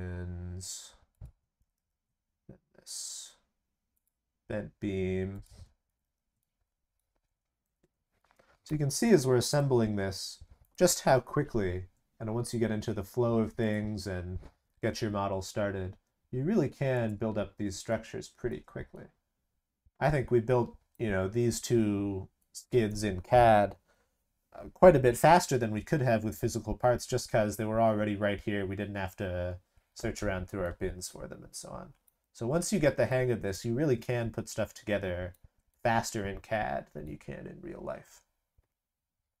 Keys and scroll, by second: 1.6 ctrl+c, 1.7 ctrl+v, 5.8 ctrl+c, 6.0 ctrl+v, 11.0 ctrl+c, 11.1 ctrl+v, 14.8 ctrl+c, 14.9 ctrl+v.